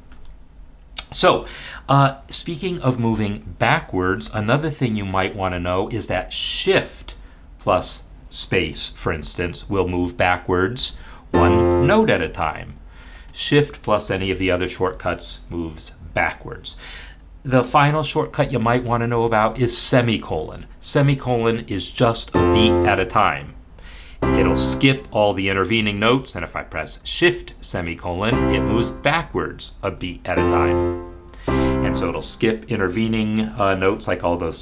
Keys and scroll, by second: 10.8 shift+space, 12.4 shift+space, 13.2 shift+space, 21.1 ;, 22.0 ;, 22.9 ;, 23.8 ;, 27.0 shift+;, 27.9 shift+;, 29.0 shift+;, 30.0 shift+;, 31.1 shift+;.